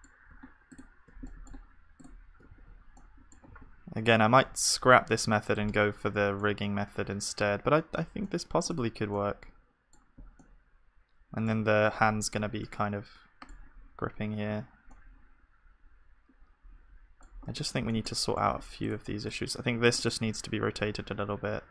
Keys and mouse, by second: 0.7-5.6 drag, 1.1-3.5 middle drag, 2.5 z, 3.5 g, 5.7-18.4 middle drag, 8.8 Tab, 17.6 Tab, 18.4-20.7 right drag, 20.1-21.7 drag, 20.7 r.